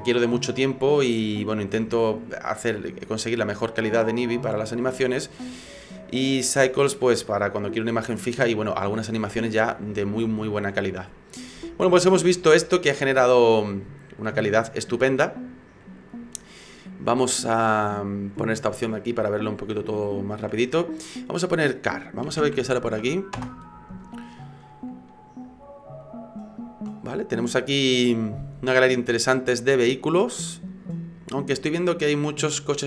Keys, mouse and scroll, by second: 18.6 click, 19.2-19.9 scroll down 5, 19.9 shift+middle click, 21.5 click.